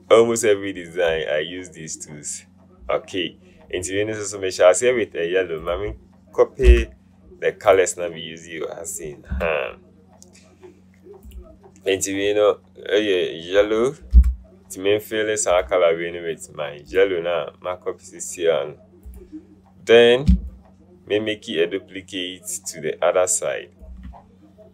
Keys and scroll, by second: 9.7 v, 14.4 u.